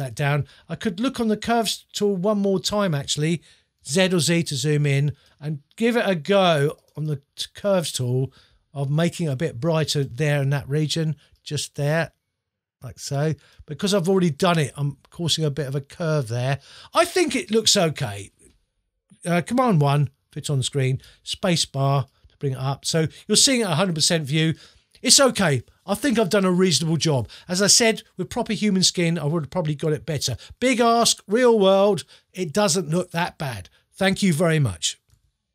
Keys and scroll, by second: 3.8 z, 19.8 super+1, 21.0 super+space.